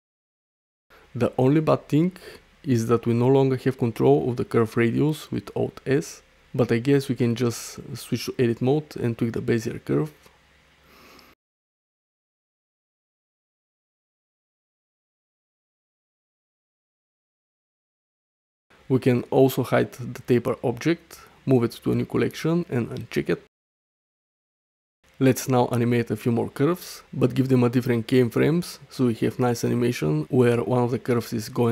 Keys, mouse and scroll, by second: 0.0 ctrl+z, 1.3 Tab, 1.7 click, 2.5 Tab, 3.0 click, 3.6 alt+s, 4.9 click, 5.1 Tab, 6.5-8.0 shift+drag, 9.8 Tab, 10.4 click, 11.3-14.2 typing, 12.0 click, 13.4 click, 13.9 Tab, 15.9-16.4 middle drag, 17.2 middle click, 18.7 space, 20.3 m, 22.7 Return, 24.5 click, 25.2 drag, 25.7-26.3 middle drag, 26.3 /, 27.0 middle click, 27.4 shift+middle drag, 27.7 middle drag, 28.1 click, 29.4-30.8 drag.